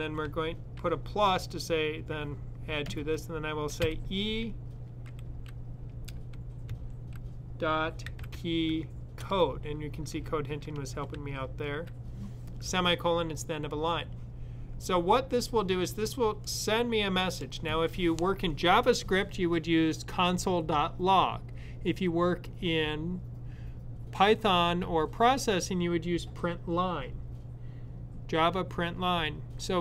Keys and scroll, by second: 0.1 typing, 7.6-8.7 typing, 10.6-11.5 typing.